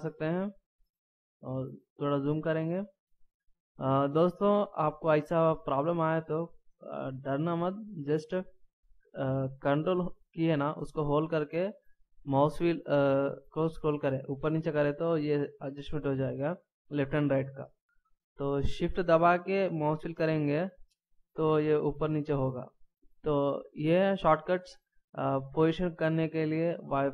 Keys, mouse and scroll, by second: 1.6 scroll up 1, 11.6 ctrl+scroll down 1, 12.6 ctrl+scroll up 1, 13.0 ctrl+scroll down 1, 13.2 ctrl+scroll up 1, 13.5-14.2 ctrl+scroll down 1, 14.2-14.6 ctrl+scroll up 1, 14.6-15.0 ctrl+scroll down 1, 15.0-15.4 ctrl+scroll up 1, 19.7-20.5 shift+scroll down 1, 20.6 shift+scroll up 1, 20.8 shift+scroll down 1, 21.1-21.5 shift+scroll up 2, 21.5-21.8 shift+scroll down 2, 21.8-22.2 shift+scroll up 2, 22.2-22.5 shift+scroll down 2, 22.5-22.9 shift+scroll up 2, 22.9-25.2 shift+scroll down 2, 26.3 scroll down 1, 27.0-27.1 scroll up 2.